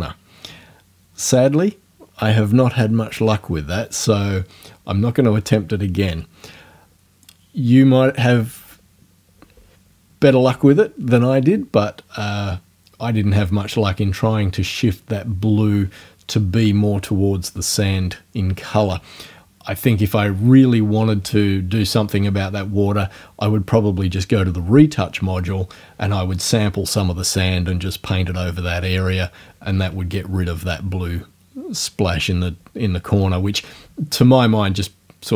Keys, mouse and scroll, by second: 21.9 click.